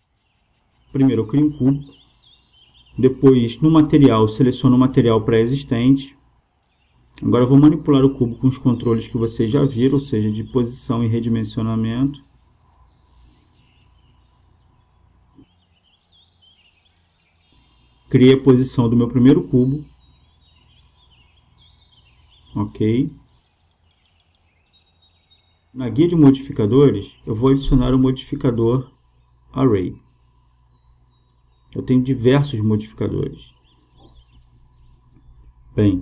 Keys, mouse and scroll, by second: 1.0 space, 2.8-4.8 drag, 5.4-7.7 drag, 9.2-11.0 drag, 11.4 s, 19.3-22.5 drag, 23.1-24.9 drag, 28.5-31.1 drag.